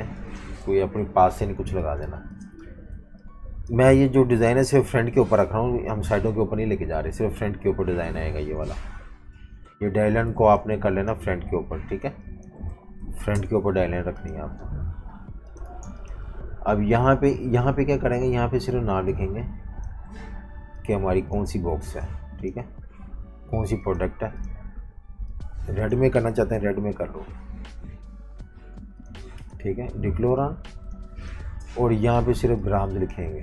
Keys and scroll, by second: 0.2 typing, 1.8-4.6 typing, 8.5 super+-, 8.7 super+-, 9.4-11.9 typing, 12.7 super+z, 13.3 shift+super+], 13.8-15.8 typing, 26.3 i, 29.2 v, 29.3 v.